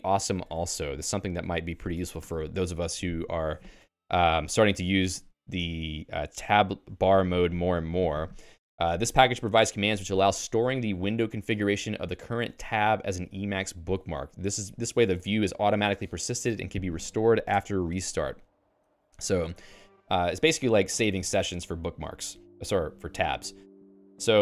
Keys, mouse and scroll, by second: 23.9 j.